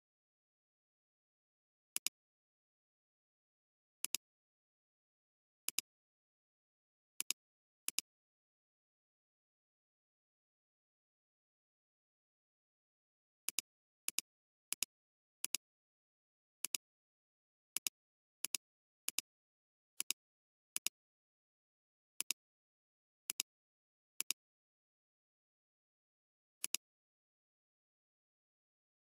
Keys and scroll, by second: 1.2 b, 10.6 ctrl+z.